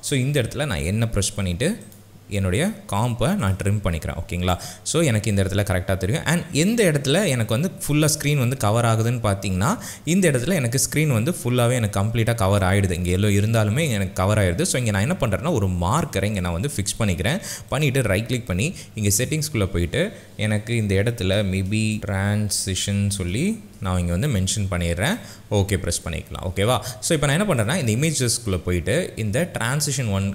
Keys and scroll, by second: 0.5 n, 21.7-24.2 typing.